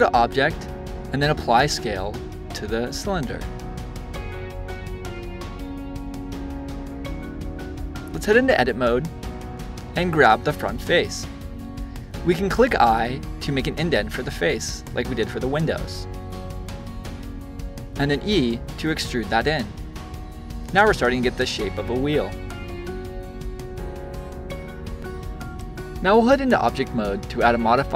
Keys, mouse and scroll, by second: 0.1-3.1 drag, 3.1-5.6 middle drag, 6.7-9.8 drag, 9.9 click, 20.5 click, 21.0-24.6 shift+middle drag, 25.4-27.9 drag.